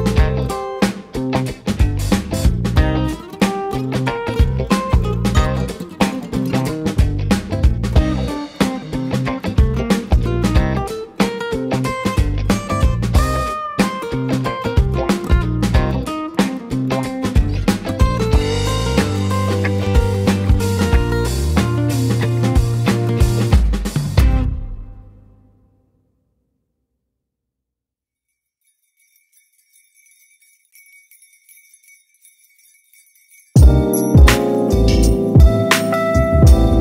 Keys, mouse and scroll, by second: 4.1 click, 5.1 h, 5.8-7.6 middle drag, 7.6 click, 9.0 ctrl+a, 10.7-12.3 drag, 14.0 click, 14.6-15.7 middle drag, 15.7 h, 19.3 ctrl+z, 20.7 g, 24.3-26.4 middle drag, 26.4 click, 28.3 click, 28.9 click, 29.3-30.2 middle drag, 30.2 click, 30.6-31.4 middle drag, 31.4 z, 32.7-34.3 middle drag, 34.3 KP_3.